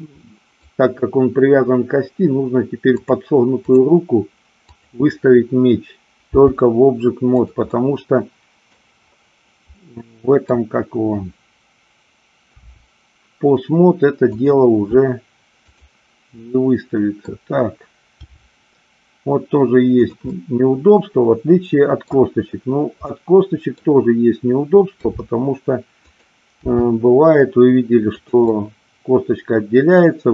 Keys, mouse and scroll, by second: 0.2 middle click, 2.9 click, 4.5 click, 6.3 g, 7.4 click, 7.7-8.7 middle drag, 9.7-10.5 middle drag, 12.5 r, 14.3 click, 15.7 click, 16.3 middle click, 18.2 g, 20.3-22.1 middle drag, 23.1-23.7 middle drag, 24.9 r, 26.1 click, 26.7 g, 28.2 click, 28.4-30.3 middle drag.